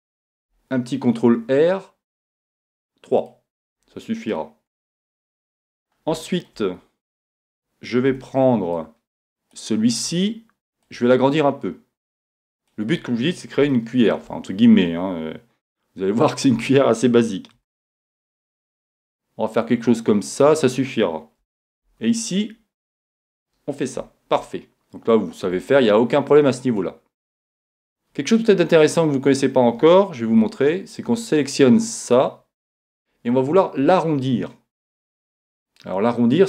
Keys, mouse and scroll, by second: 3.3-5.1 drag, 5.1 middle click, 7.2 a, 8.1 b, 10.8-12.7 drag, 13.7-15.7 middle drag, 16.6 e, 20.4-22.1 drag, 21.9 ctrl+r, 23.3-25.0 drag, 24.5-26.2 middle drag, 26.2-27.0 scroll down 1, 27.0 middle click, 27.6-28.9 scroll up 1, 28.9 scroll up 1, 28.9 middle click, 30.4 b.